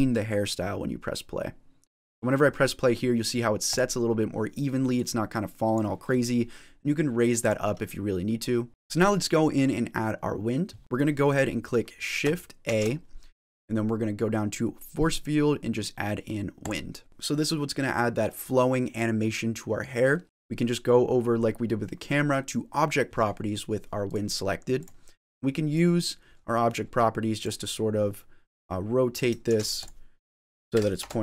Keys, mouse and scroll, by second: 3.8 click, 5.0 click, 7.3 click, 8.7 click, 8.7 middle click, 8.7 scroll down 2, 12.5 shift+a, 17.1 middle click, 17.1 scroll down 4, 20.2 middle click, 23.9 click, 24.6 click, 25.6 click, 28.4 click, 29.5 ctrl+z, 29.6 click.